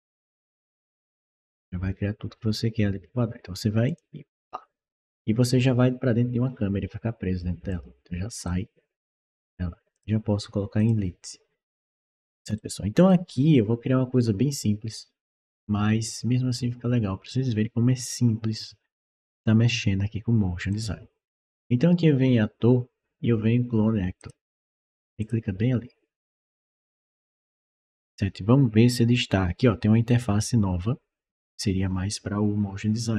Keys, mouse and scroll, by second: 3.7 click, 7.5 click, 8.3 right click, 9.8 click, 10.6 click, 12.4 right click, 20.5 click, 24.0 click, 25.0 click, 33.0 click.